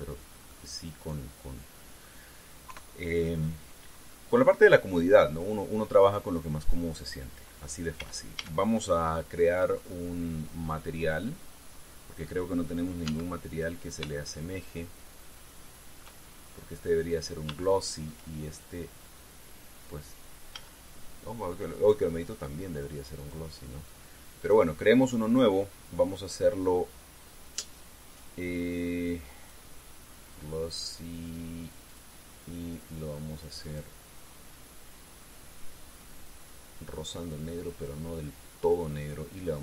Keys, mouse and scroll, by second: 0.3-0.6 scroll down 1, 1.0 scroll down 1, 1.2-2.9 middle drag, 3.4 KP_3, 4.7-5.3 scroll up 2, 8.7 a, 12.3-12.8 scroll down 2, 13.8 z, 14.9-16.9 shift+middle drag, 17.1 shift+scroll up 3, 18.3 shift+click, 21.3 z, 23.9 click, 25.1 click, 30.1 click, 32.6 click, 34.4 click, 35.7-38.7 drag.